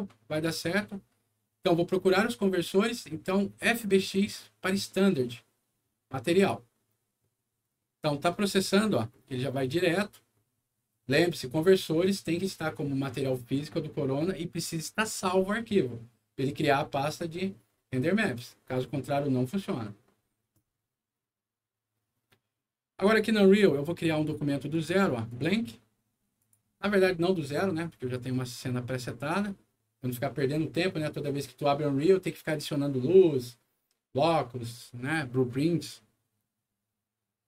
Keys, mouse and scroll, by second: 0.3 click, 6.3 click, 23.0 click, 24.7 click, 25.2 click, 26.3 click.